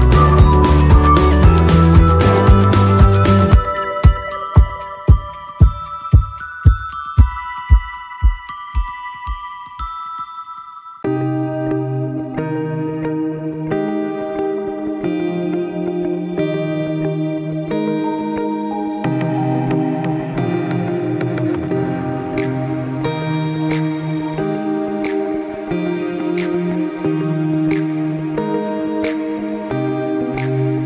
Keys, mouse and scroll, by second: 1.5 click, 23.0 click, 27.2 ctrl+Num_Lock, 27.6 click, 30.4 click.